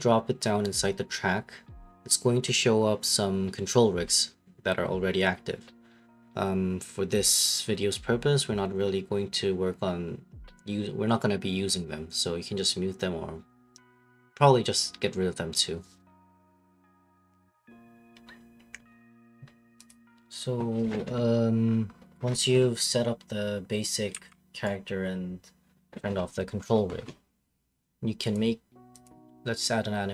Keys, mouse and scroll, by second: 6.1 click, 11.3-12.2 scroll, 15.0 right click.